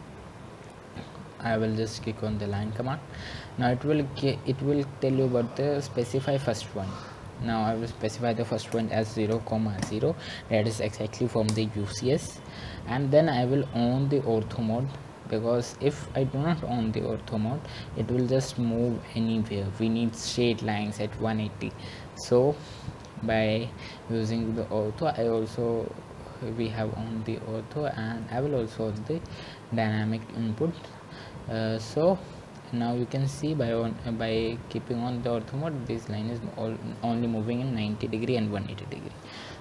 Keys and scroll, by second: 11.6-12.4 typing.